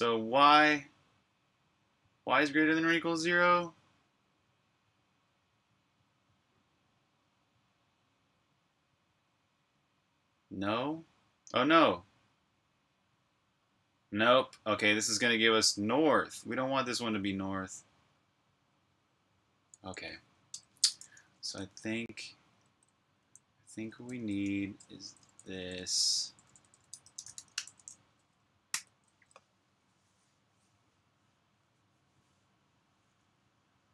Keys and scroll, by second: 21.3 super+Tab, 22.8-29.9 typing.